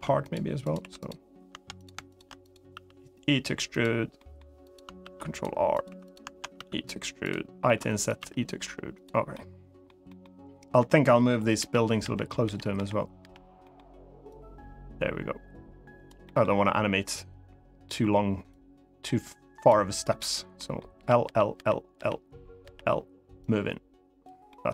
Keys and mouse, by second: 0.4 click, 0.5 3, 0.7 click, 2.5 e, 3.4 click, 3.9 middle click, 4.4 click, 4.7 ctrl+r, 5.5 click, 5.6 3, 6.3 e, 6.9 click, 7.4 i, 7.8 click, 7.9 e, 8.7 click, 9.1 middle click, 9.8 middle click, 11.3-12.9 typing, 13.3 middle click, 14.1-15.8 drag, 16.0 middle click, 18.2-19.4 drag, 19.9 click, 20.3 middle click, 20.7-22.4 typing, 23.2 click, 24.2 middle click.